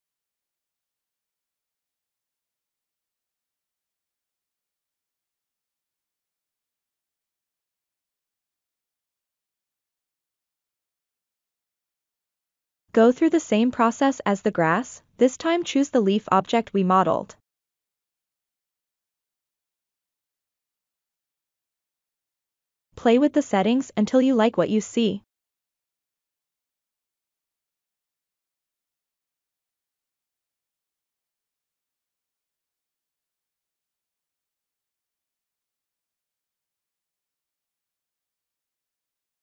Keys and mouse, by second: 2.1 click, 3.3 click, 4.5 click, 5.4 click, 7.0 click, 7.9-8.9 drag, 9.9-12.4 drag, 13.3-14.4 middle drag, 15.4 click, 16.8-18.3 middle drag, 19.7-21.4 drag, 22.1-24.8 drag, 25.5-28.0 drag, 28.8 click, 29.8-32.0 drag, 31.1 KP_0, 31.3 KP_0, 33.5-35.4 drag, 34.7 KP_0, 36.6-39.4 drag.